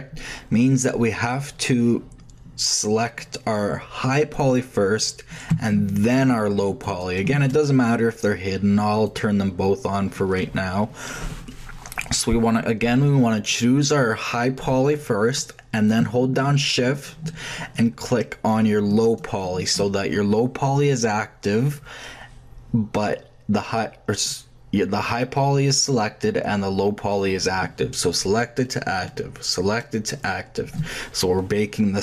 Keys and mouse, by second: 4.1-5.5 drag, 9.0-10.8 drag, 14.1-15.9 drag, 19.0-32.0 shift+drag, 20.7-32.0 middle drag.